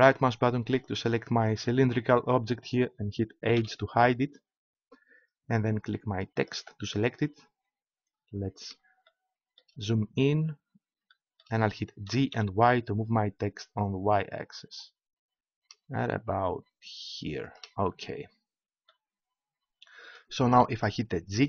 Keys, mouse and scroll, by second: 0.0-2.0 right drag, 2.0 middle click, 3.5 middle click, 3.6 h, 6.3-8.8 right drag, 8.8-12.0 middle drag, 12.0 g, 17.6-19.5 drag.